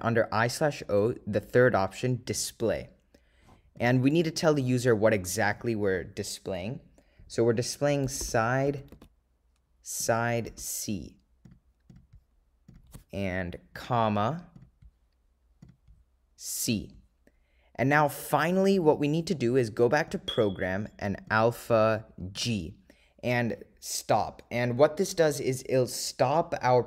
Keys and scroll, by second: 2.4 3, 10.1 0, 11.8 ., 12.2 0, 14.7 ,, 18.0 Return.